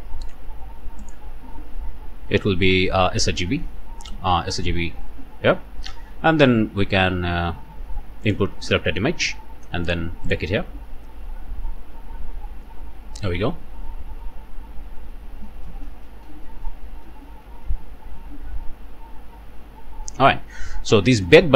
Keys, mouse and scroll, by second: 1.0 click, 1.6-1.9 scroll down 1, 2.7 scroll down 2, 5.1-5.8 scroll up 2, 6.0 scroll down 2, 8.3 click, 10.3 click.